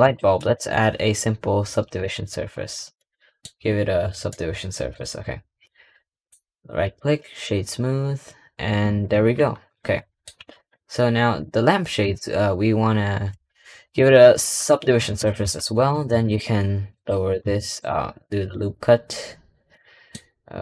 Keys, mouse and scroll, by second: 2.5-2.8 scroll up 4, 2.8 shift+middle click, 3.3-4.2 scroll up 2, 4.2-6.0 middle drag, 6.0-8.7 right drag, 8.7 scroll down 1, 9.5 click, 9.8 middle click, 10.2 Tab, 10.4 click, 14.3-14.7 middle drag, 15.2-19.6 middle drag, 20.1 middle click.